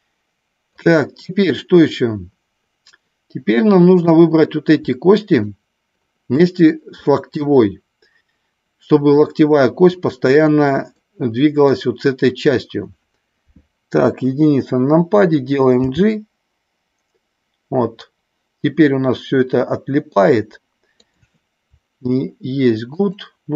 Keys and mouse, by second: 0.7-4.1 drag, 5.4 shift+click, 7.1 middle drag, 10.9-11.7 middle drag, 13.9 KP_1, 15.8 g, 21.0 click, 23.0-23.5 shift+drag.